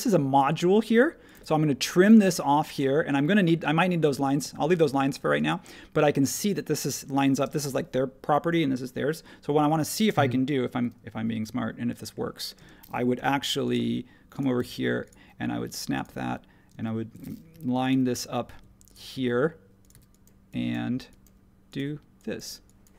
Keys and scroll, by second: 1.3 e, 4.4 super+z, 7.3 space, 12.6 space, 13.1 |, 14.5 ↺, 16.1 ↺, 16.7 space, 17.5 |, 18.5 ⟲, 19.9 e.